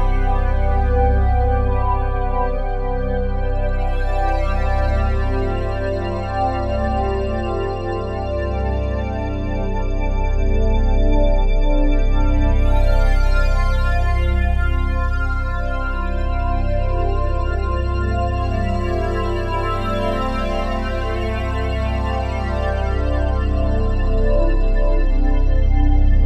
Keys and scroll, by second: 4.4 s, 12.5 s, 14.1 1.